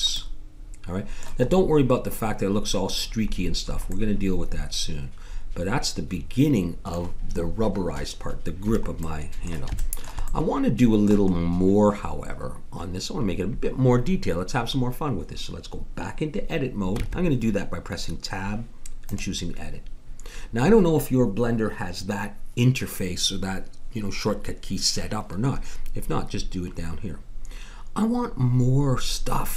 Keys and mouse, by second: 0.4 click, 0.4-5.7 middle drag, 9.0 middle click, 17.0 Tab.